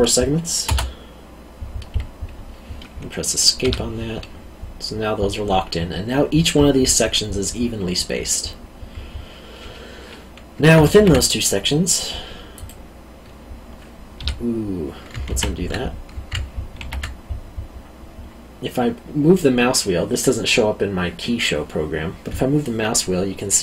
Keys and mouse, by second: 3.6 Escape, 10.9 ctrl+r, 12.5 click, 14.1 Escape, 15.2 ctrl+z, 16.7 ctrl+r.